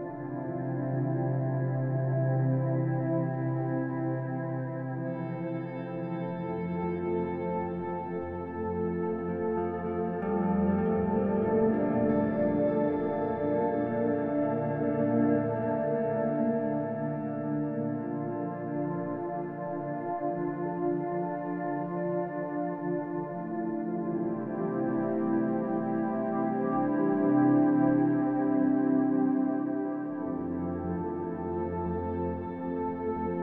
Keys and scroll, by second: 3.7 z, 20.6 z, 30.7 z, 31.9 z, 32.9 e.